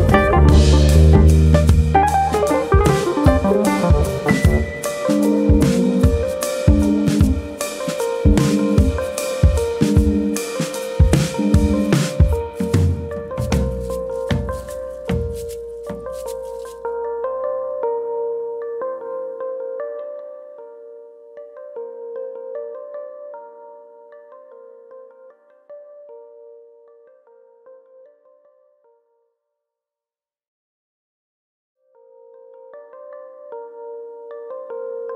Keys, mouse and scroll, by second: 0.3 r, 1.4 click, 1.6 middle click, 2.4 middle click, 2.9 shift+middle click, 3.3 shift+middle click, 3.3 s, 4.0 click, 4.8 click, 5.9 middle click, 6.3 middle click, 7.4 e, 8.1 click, 8.3 middle click, 8.8 middle click, 9.2 s, 9.6 click, 10.0 click, 10.5 middle click, 10.9 middle click, 11.7 click, 11.7 2, 12.0 middle click, 12.3 shift+middle click, 12.4 shift+middle click, 13.1 click, 14.4 click, 16.6 click, 16.6 middle click, 17.3 click, 18.0 middle click, 18.0 click, 20.1 middle click, 20.6 shift+middle click, 21.0 middle click, 21.6 shift+middle click, 21.9 scroll up 1, 22.1 middle click, 22.3 scroll down 1, 22.6 middle click, 23.6 1, 23.7 click, 23.9 middle click, 24.3 click, 24.9 middle click, 25.5 click, 25.7 middle click, 25.9 middle click, 26.5-27.3 scroll up 2, 26.7 middle click, 28.4 middle click, 33.1 middle click, 33.4 ctrl+r.